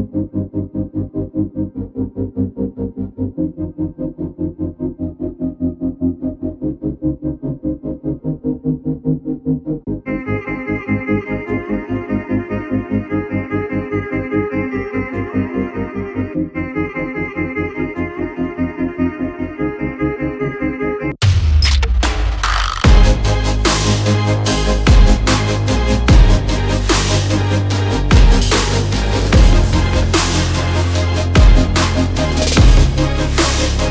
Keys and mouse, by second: 0.6-0.9 drag, 1.2-1.6 shift+middle drag, 2.9 shift+middle click, 4.0-4.7 middle drag, 5.0-5.5 shift+middle drag, 6.1-6.4 shift+middle drag, 6.6 middle click, 7.0 Tab, 7.3 click, 8.2 middle click, 8.6 shift+click, 8.6 shift+right click, 9.4 Tab, 10.2 drag, 10.2 right drag, 10.7 click, 12.0 shift+click, 12.0 shift+right click, 12.7 ctrl+a, 15.9-23.8 drag, 24.6-27.6 drag, 27.6-28.3 middle drag, 28.5 shift+middle click, 29.5 middle click, 30.1 click, 33.0 click.